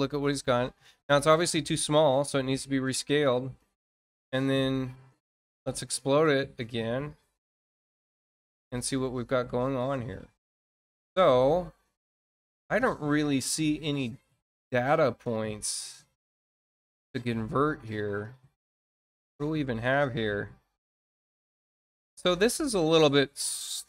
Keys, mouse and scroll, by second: 2.9 space, 3.8 scroll up 2, 5.3 click, 7.1 click, 8.3 scroll down 2, 8.7 click, 10.8 middle click, 13.2-13.6 scroll up 2, 14.8 middle click, 16.6-16.9 scroll up 2, 17.1 scroll up 2, 18.4 scroll up 2, 19.5-20.2 scroll down 4, 20.5 scroll down 2, 21.3 scroll down 2, 23.4 scroll down 2.